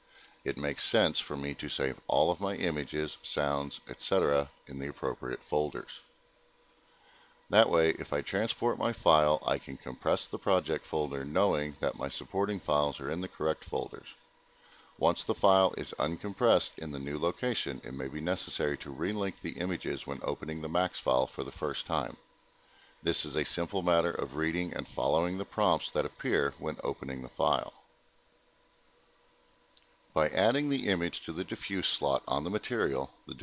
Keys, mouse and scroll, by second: 2.4 right click, 9.0 click, 17.2 click, 18.1 right click, 19.3 click, 20.8 click, 23.2 click, 24.2 click, 24.4 click, 27.3 click, 27.5 click, 28.9 click, 29.1 click, 31.1 click, 32.9 click.